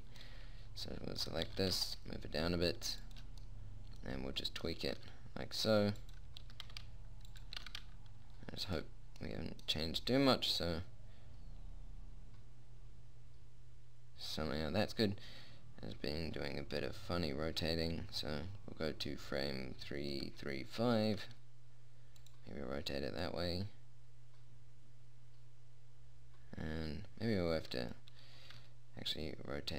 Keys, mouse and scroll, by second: 1.9 g, 5.3 r, 6.9 g, 8.0 r, 9.7-11.5 middle drag, 21.5 r, 23.7-25.3 drag, 25.3-26.3 middle drag, 28.9 r.